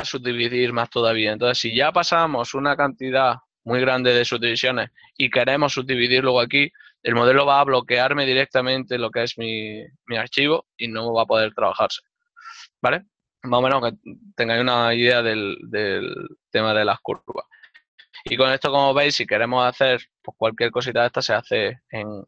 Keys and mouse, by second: 7.7 middle click, 9.4 click, 11.4 ctrl+middle click, 15.7 middle click, 20.1 7.